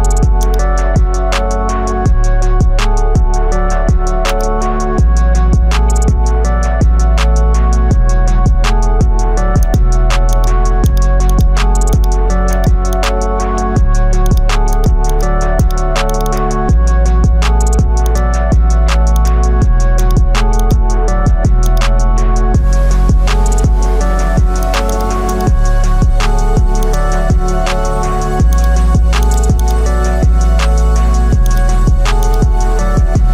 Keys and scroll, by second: 23.4 ctrl+alt+z, 23.8 ctrl+alt+z.